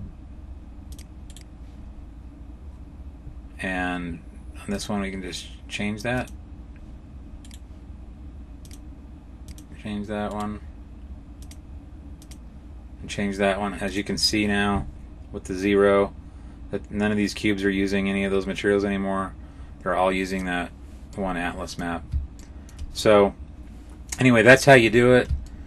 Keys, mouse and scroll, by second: 1.2 right click, 4.6 click, 7.3 right click, 8.5 click, 10.2 right click, 11.3 click, 13.7 click, 21.0 middle click, 22.3 shift+middle click, 22.8 middle click, 24.9-25.5 scroll down 2, 25.3 shift+middle click.